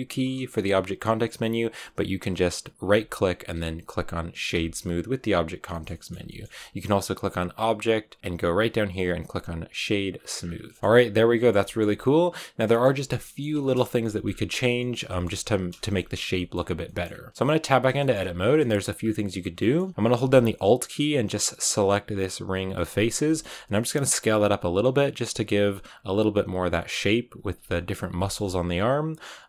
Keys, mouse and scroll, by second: 2.8-5.6 right drag, 5.6 shift+middle click, 6.0 scroll down 1, 6.2-10.0 shift+middle drag, 10.3 scroll down 4, 10.7-11.7 shift+middle drag, 11.7 scroll up 2, 11.9-14.1 middle drag, 14.1-14.7 scroll up 3, 14.7-15.9 shift+middle drag, 15.9-16.2 scroll up 1, 16.2 shift+middle click, 17.0-17.3 scroll up 1, 17.3 right click, 17.9 middle click, 18.0 scroll up 2, 18.5 shift+middle click, 18.9-19.5 scroll up 1, 19.5-22.6 shift+middle drag, 22.6 alt+right click, 23.1 shift+middle click, 23.7 s, 27.6-29.4 shift+middle drag.